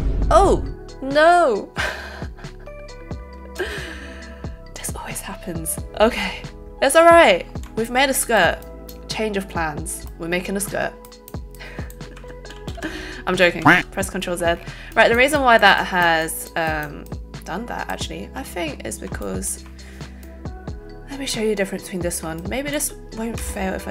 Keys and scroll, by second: 3.6 space, 12.6 ctrl+alt+z, 13.3 ctrl+alt+z, 23.3 alt+space.